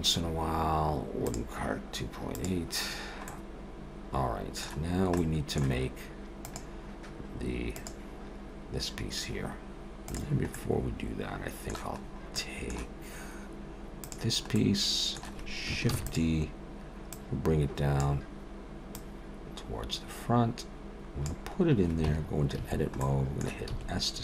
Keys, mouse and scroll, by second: 1.1 click, 2.5 click, 3.3 middle click, 4.9 scroll down 1, 5.2 middle click, 10.5 middle click, 12.0-13.0 scroll up 2, 12.4 middle click, 14.0 click, 14.6 middle click, 15.9 shift+d, 17.1 click, 21.3 click, 22.1 Tab, 22.6 a, 23.0 middle click, 23.7 s.